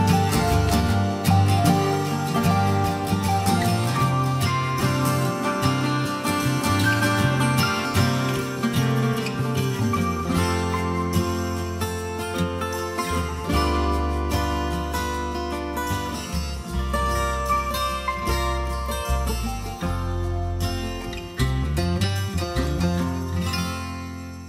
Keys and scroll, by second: 1.5 ctrl+t, 10.8 Return.